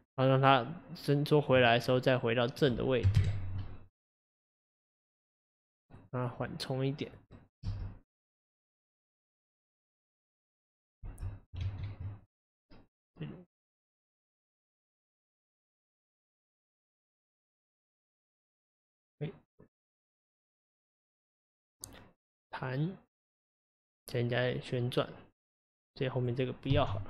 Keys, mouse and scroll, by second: 3.2 click, 6.4 click, 7.4 click, 7.6 space, 11.1 space, 11.7 ctrl+z, 13.5-17.9 drag, 25.8 click.